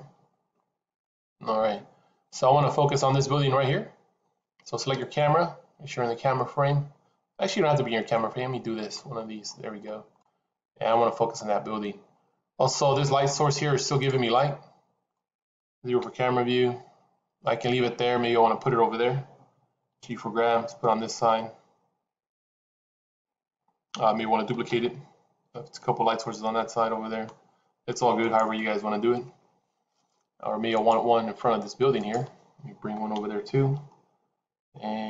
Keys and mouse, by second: 2.7-3.1 drag, 4.9 click, 8.0-8.9 middle drag, 10.0-10.8 middle drag, 11.3-13.1 middle drag, 13.9 click, 15.0 middle click, 15.9 KP_0, 19.8 g, 25.1 shift+d, 30.6 click, 31.9 click, 33.1 KP_7.